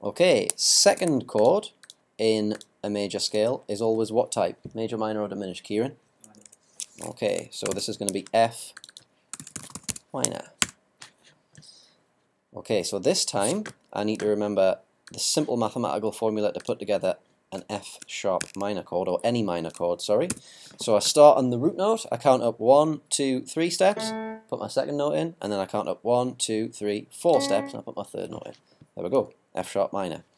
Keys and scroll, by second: 1.0 super+r, 7.7 shift+f, 9.1-10.0 typing, 20.3 ctrl+b.